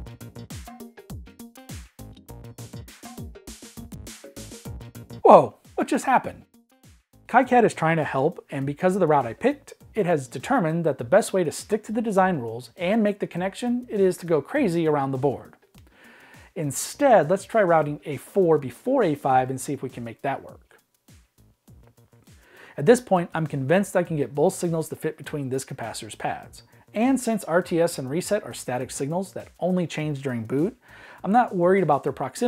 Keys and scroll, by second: 15.7 Escape, 17.6 super+z, 17.9 Escape, 17.9 super+z, 29.2 v, 29.8 v, 30.5 v, 31.3 Escape.